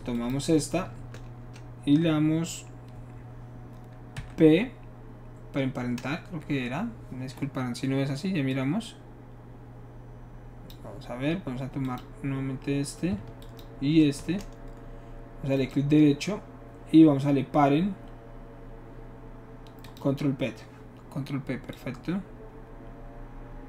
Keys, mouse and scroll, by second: 0.1 shift+click, 4.2 p, 8.5-10.7 drag, 11.8 click, 13.4 shift+click, 15.5 shift+right click, 19.9 click, 21.7-23.6 drag.